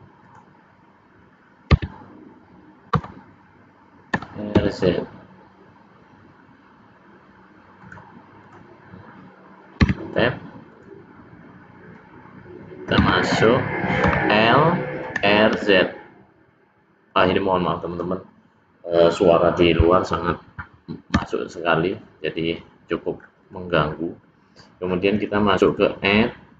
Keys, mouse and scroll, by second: 0.2 click, 1.7 Tab, 2.9 l, 4.0 r, 8.3 click, 9.9 Tab, 10.6 click, 13.0 Tab, 14.0 l, 15.1 r, 17.8 click, 19.9 click, 21.2 Tab, 21.8 middle click, 23.4 click, 23.8-24.2 scroll down 3, 24.2 middle click, 25.6 click.